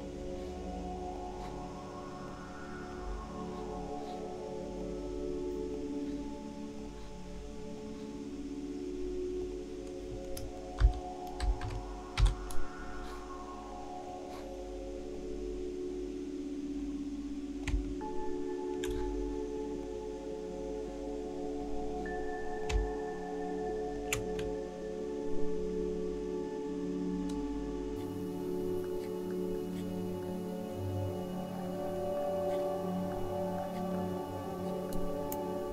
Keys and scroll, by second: 10.8-12.2 typing.